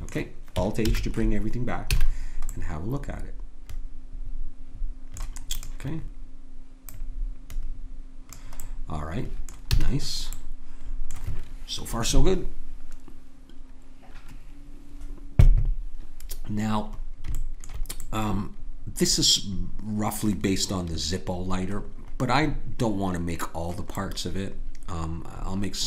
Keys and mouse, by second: 0.8 alt+h, 1.9 a, 5.5-8.8 drag, 9.7 a, 19.5 middle click, 21.9-25.7 middle drag.